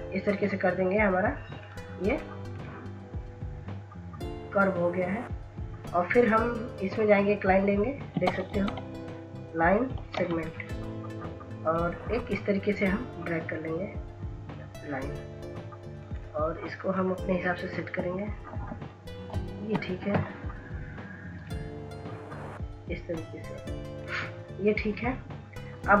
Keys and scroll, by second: 9.6 ctrl+s, 10.3 ctrl+s, 10.7 ctrl+s, 10.8 ctrl+s, 19.5 Up, 20.1 Down.